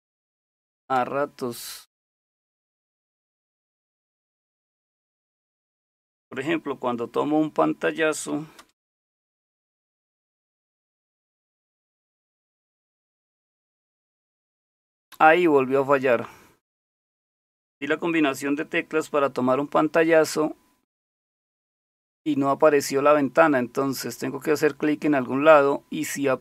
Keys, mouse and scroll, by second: 0.0-0.8 typing, 3.1-4.9 typing, 8.6 super+Return, 11.7 super+Print.